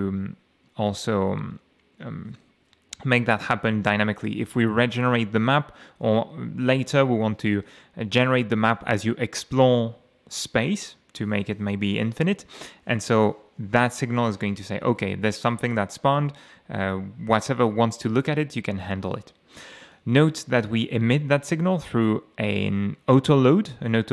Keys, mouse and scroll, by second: 19.8 click, 20.5 click.